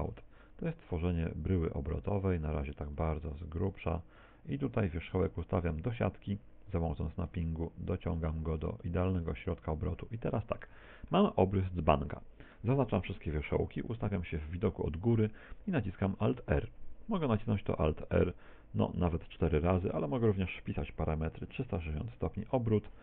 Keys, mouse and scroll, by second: 0.2 e, 1.2 e, 2.1 click, 2.2 e, 3.7 e, 3.9 e, 5.0 ctrl+click, 5.4 shift+s, 7.1 click, 8.8 shift+middle click, 9.9 a, 10.4 scroll down 1, 10.9 shift+middle click, 12.8 a, 13.9 KP_7, 20.2 click.